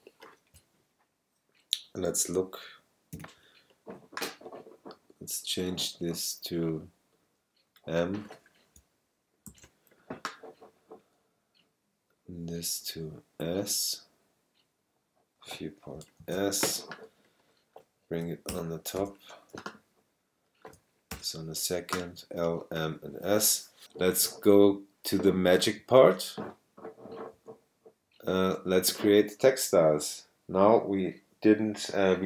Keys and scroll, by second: 3.1 alt+super+i, 9.5 shift+m, 16.2 shift+s, 18.5 alt+super+Up, 21.1 alt+super+Up.